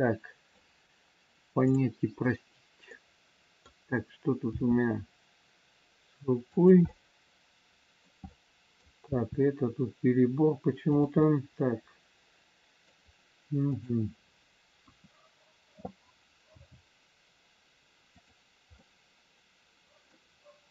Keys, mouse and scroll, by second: 1.5 middle click, 1.5 click, 2.8 middle click, 4.5 r, 6.8 middle click, 8.7 middle click, 9.0 r, 11.2 middle click, 13.7 click, 14.8 KP_1, 16.6 g, 18.7 scroll up 1, 18.8 middle click.